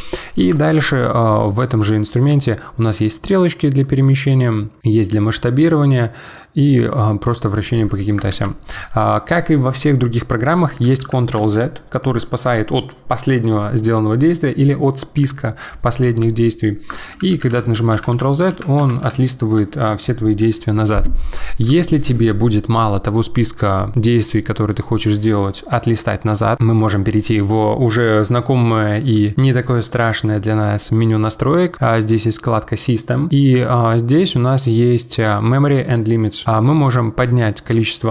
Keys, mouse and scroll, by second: 0.5-2.1 shift+middle drag, 2.1 click, 3.4 click, 4.4 click, 6.1 click, 6.9 click, 8.3 ctrl+z, 10.7 ctrl+z, 11.0 ctrl+z, 11.4 ctrl+z, 17.1 ctrl+z, 17.3 ctrl+z, 17.5 ctrl+z, 17.9 ctrl+z, 18.5 ctrl+z, 19.0 ctrl+z, 22.7-25.6 drag.